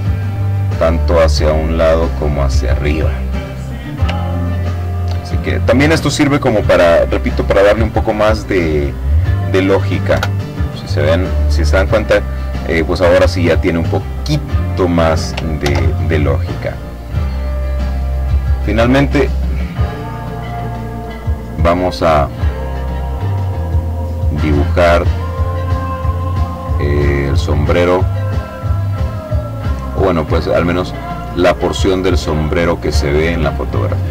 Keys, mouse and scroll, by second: 2.8-3.4 ctrl+scroll down 2, 3.7-4.8 ctrl+drag, 7.8 click, 8.6 Delete, 14.1 ctrl+z, 15.0-16.0 middle drag, 18.7 click, 20.4 click, 21.2 click, 23.0 click, 24.3-26.3 drag, 26.5 click, 27.7 click, 28.9-29.9 drag, 32.4 click.